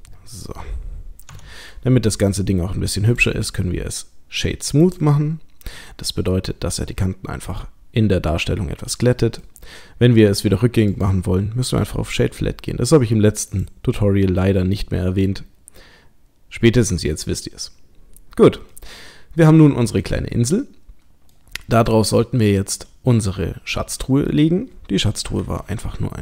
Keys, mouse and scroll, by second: 0.1-1.3 scroll down 7, 1.3 Tab, 1.8 middle click, 3.1 click, 3.5 right click, 5.7 middle click, 9.6-10.4 scroll up 1, 10.9 right click, 13.5 click, 14.4 middle click, 17.1-17.4 scroll down 1, 17.6 scroll down 1, 18.3-18.7 scroll down 1, 18.7 middle click, 25.4 shift+a.